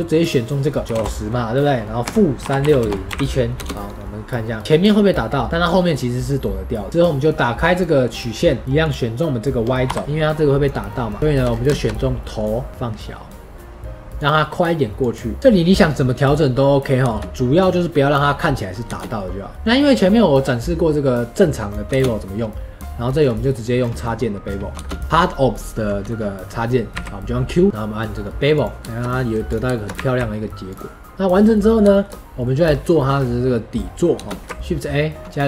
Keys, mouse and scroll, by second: 0.1-3.1 drag, 3.1 i, 3.5 space, 4.6-6.9 middle drag, 6.9-8.6 drag, 9.8 KP_Decimal, 10.0-10.8 drag, 10.8-11.1 middle drag, 11.1 scroll up 2, 11.2 shift+middle drag, 11.4 scroll down 1, 11.6-19.5 shift+middle drag, 19.5 ctrl+a, 23.1 scroll up 3, 23.9-24.4 middle drag, 24.4-24.7 scroll down 2, 24.7 space, 28.8-29.4 scroll up 5, 28.8-29.2 shift+middle drag, 29.4 drag, 29.6 shift+middle drag, 29.9 q, 31.1 scroll up 4, 31.3-34.4 middle drag, 34.4 shift+a.